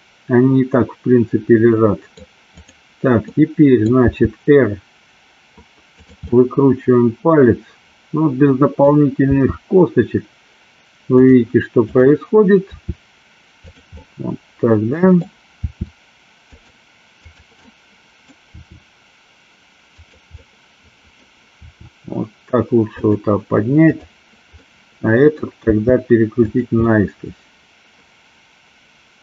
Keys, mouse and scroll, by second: 3.4 middle click, 4.2 r, 5.9 click, 6.4-8.9 middle drag, 9.3 r, 11.2 click, 11.9 click, 12.7 r, 13.7 click, 14.1-15.3 middle drag, 16.6 drag, 17.7-18.3 middle drag, 20.0 click, 20.6 middle click, 21.6 r, 23.1 click, 24.7 middle click, 25.7 r, 26.6 click, 26.8-29.2 middle drag.